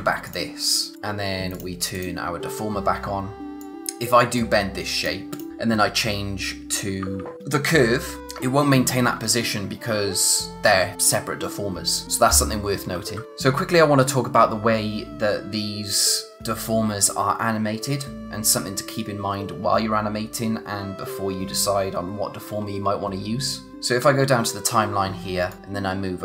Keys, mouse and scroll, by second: 0.2 click, 0.8-1.3 scroll down 1, 1.5 click, 5.5 typing, 8.2 [, 9.0 ], 12.9 ], 13.1 [, 25.5 click.